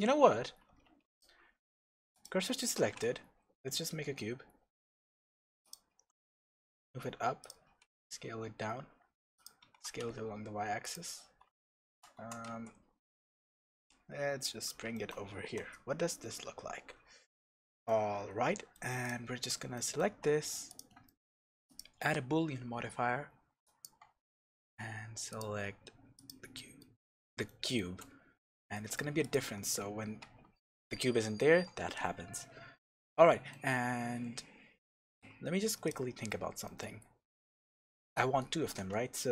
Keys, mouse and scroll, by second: 0.6 Tab, 1.0 click, 1.7 shift+s, 2.4-7.5 middle drag, 2.7 shift+a, 6.3 g, 7.5 click, 7.8 s, 9.4 click, 9.6 s, 10.9 click, 11.6-14.7 shift+middle drag, 12.1 g, 14.7 click, 14.9-19.0 shift+middle drag, 15.5 KP_0, 16.1 scroll down 2, 16.4-17.0 scroll up 1, 17.4-17.8 scroll down 1, 19.0 click, 19.2 scroll up 1, 19.7 shift+middle click, 20.6 click, 21.0 shift+middle click, 21.6-25.4 drag, 26.5-29.2 middle drag, 29.2 click, 29.6 h, 31.5 ctrl+z, 32.2 scroll down 1, 32.7-35.8 middle drag, 34.5-34.9 scroll down 2, 34.9-35.8 scroll up 2, 35.8 click, 36.6-39.3 middle drag.